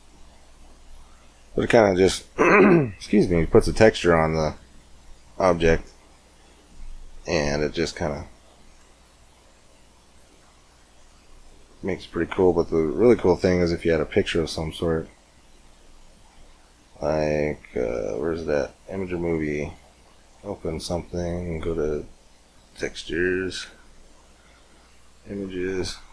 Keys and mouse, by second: 3.9-5.6 middle drag, 9.3-18.8 drag, 20.0 click.